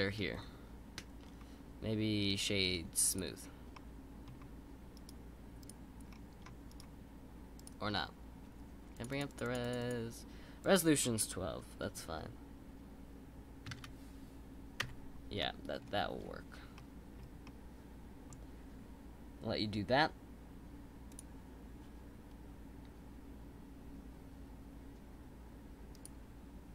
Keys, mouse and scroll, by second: 2.3-3.7 right drag, 3.7-4.9 middle drag, 4.9-6.1 right drag, 6.1-6.7 scroll up 2, 6.7-8.9 right drag, 8.9-13.8 drag, 15.4-15.8 middle drag, 15.8-16.7 scroll down 1, 16.7 middle click, 17.2 scroll down 1, 17.4-20.6 middle drag.